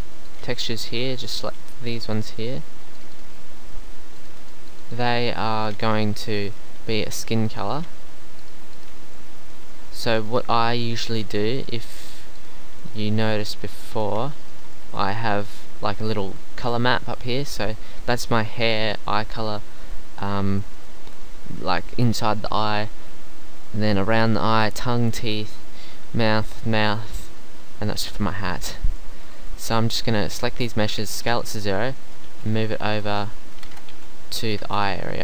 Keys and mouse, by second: 1.7-3.4 middle drag, 3.6-6.6 middle drag, 7.8 shift+click, 12.8-26.5 middle drag, 31.0 s, 32.3 g, 33.7 shift+Tab, 33.9 g, 34.6 shift+Tab.